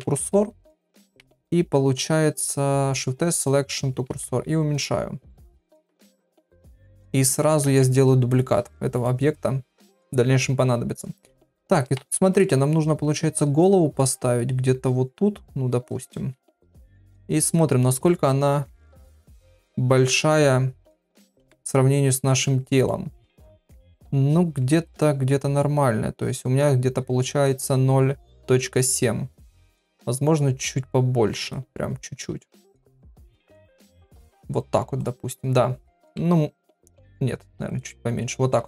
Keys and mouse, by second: 0.0 Tab, 0.2 click, 1.2 shift+s, 7.6 shift+d, 12.0 z, 13.2 g, 16.2 z, 21.5 KP_3, 22.8 middle click, 23.9 KP_1, 24.8 click, 29.6 s, 31.7 g, 33.2 g, 37.0 s.